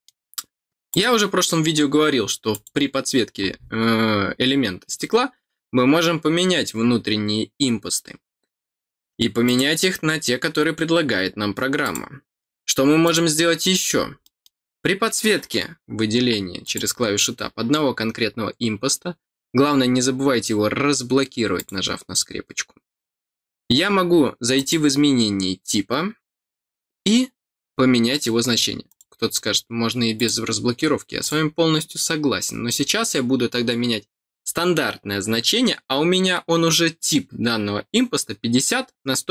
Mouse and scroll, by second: 0.9 click, 2.5 click, 4.1-4.4 scroll down 6, 9.4 click, 10.5-11.1 scroll down 2, 11.8 click, 13.0 click, 14.2 middle click, 16.6 click, 24.5 click, 28.8 click, 30.1 click, 31.2 click.